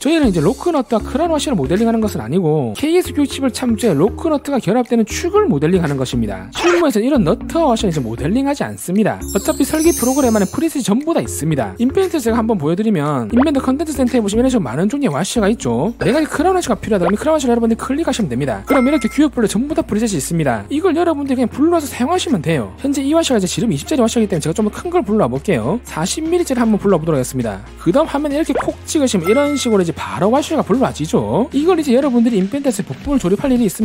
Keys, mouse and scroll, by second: 12.3 click, 19.5 click, 20.0 click, 20.3 click, 20.6 click, 21.4 click, 26.8 click, 29.0 click, 29.9 right click, 30.6 click.